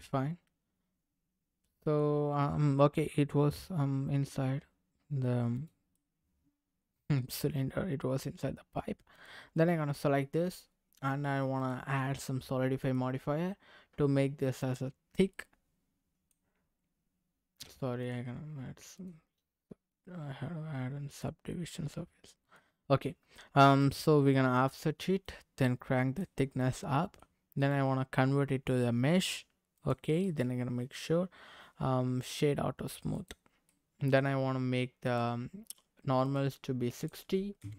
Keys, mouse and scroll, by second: 2.3-2.7 scroll up 2, 4.3 g, 5.5 click, 5.9-8.8 middle drag, 9.1 click, 9.5 middle click, 11.5 click, 12.8-14.9 drag, 15.3-16.3 middle drag, 18.0 click, 18.9-21.2 drag, 22.1 middle click, 23.8 click, 25.2-26.3 drag, 26.6 middle click, 27.6-30.0 right drag, 30.2-31.8 right drag, 32.2-33.3 right drag, 33.6 middle click, 35.0 click, 36.2 click, 36.9-37.7 drag.